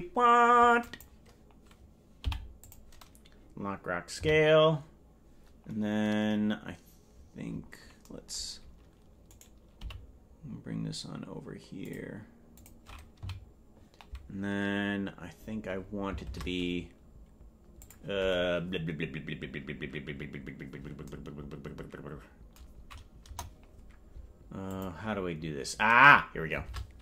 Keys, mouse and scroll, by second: 0.9 click, 2.2 i, 4.3 Right, 7.1-9.2 scroll up 13, 9.3 right click, 9.8 g, 12.6 click, 13.3 Right, 16.3 shift+`, 23.2 KP_0, 24.7 click, 26.7 shift+`.